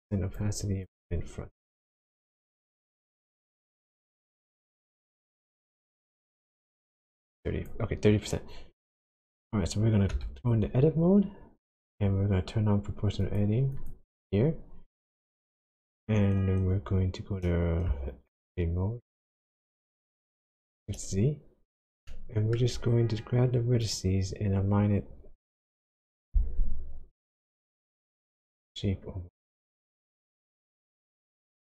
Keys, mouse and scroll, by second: 0.8 click, 2.7 click, 8.9 click, 10.1 Tab, 10.8-11.7 scroll up 2, 11.7 scroll down 1, 13.2 click, 13.7 click, 19.8 shift+z, 21.4-21.9 scroll up 2, 22.0 shift+scroll down 1, 22.1 shift+middle click, 22.9-23.8 scroll down 1, 23.8 click, 25.7 g, 26.5-27.8 scroll up 5, 29.5 click, 30.4 click, 30.8 g.